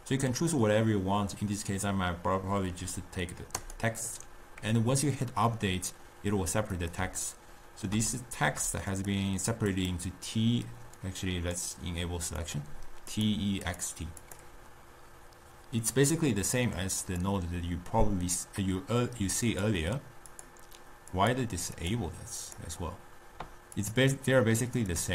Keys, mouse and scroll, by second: 3.6-6.8 drag, 6.9 click, 7.4-9.0 ctrl+middle drag, 9.0 click, 9.8 click, 11.3-12.8 drag, 13.3 drag, 14.3 click, 17.2 drag, 19.6 click, 20.5-22.0 drag, 22.5 click, 24.0 click, 24.9 drag.